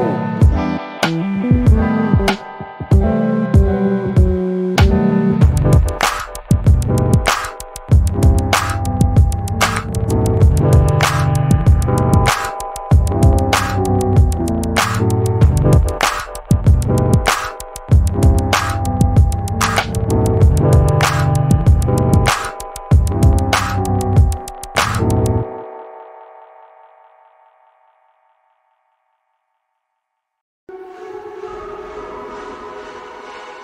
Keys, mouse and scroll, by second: 0.3 scroll up 1, 0.3 middle click, 2.3 click, 19.4 middle click, 20.2 alt+click, 21.4-21.8 scroll up 1, 22.1 click, 24.8 middle click, 28.1 click, 30.4 middle click, 31.2 alt+click.